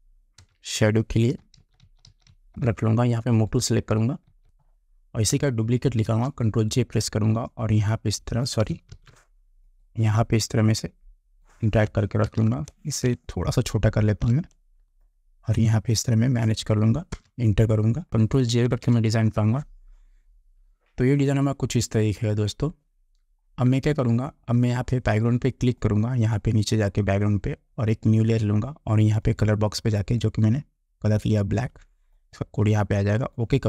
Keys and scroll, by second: 0.5 Return, 1.7 shift+Down, 4.4 shift+Down, 4.4 Return, 6.2 ctrl+j, 9.1 ctrl+z, 12.4 ctrl+t, 17.2 Return, 18.1 Down, 18.8 ctrl+0.